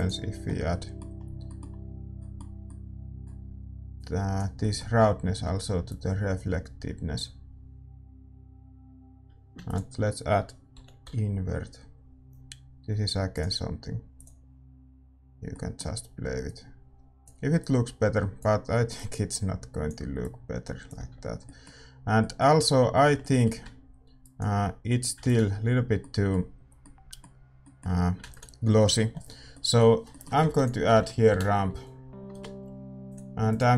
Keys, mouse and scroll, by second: 5.8-26.0 drag, 15.5-17.2 middle drag, 21.4-25.8 middle drag, 21.4 x, 25.8 ctrl+s, 29.2 ctrl+s, 29.2-33.4 middle drag, 33.4 shift+a.